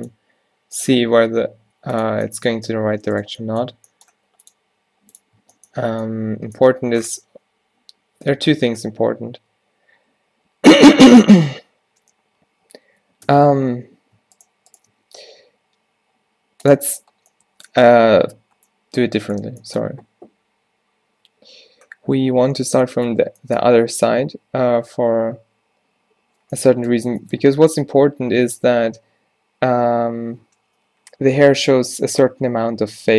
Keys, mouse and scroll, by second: 1.2 g, 2.3 click, 2.7 z, 4.2 g, 4.7 r, 5.4 Tab, 7.4 z, 8.4 z, 9.0 Tab, 9.4 Tab, 13.4 Tab, 15.0 x, 21.3 z, 24.9 z, 28.0 z.